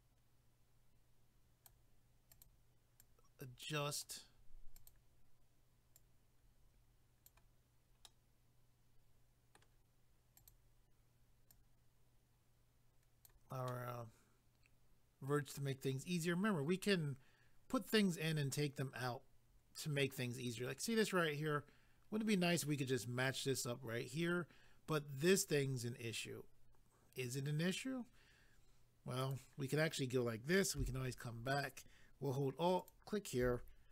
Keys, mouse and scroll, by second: 2.3 click, 2.4 click, 3.0 click, 4.8 click, 4.9 click, 5.9 click, 8.1 middle click, 10.4 click, 10.5 click, 11.5 click, 13.7 middle click, 29.2 click, 29.3 click, 32.8 alt+click.